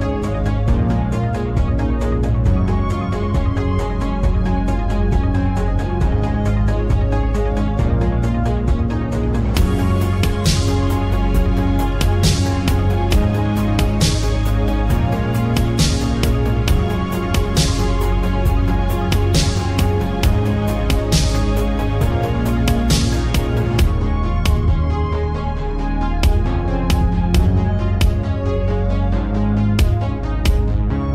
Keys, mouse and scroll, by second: 7.8 z, 10.5-11.0 scroll up 2, 15.4 click, 17.3 click, 18.3-18.8 scroll up 4, 20.8 click, 22.3 click, 22.9-31.1 drag.